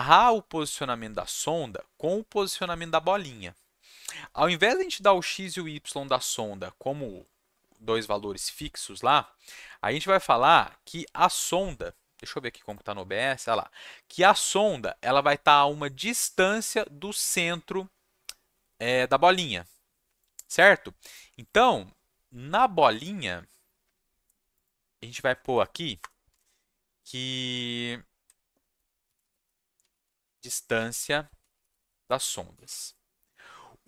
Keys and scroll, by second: 26.0 Return, 26.3 Tab, 28.8-33.1 typing.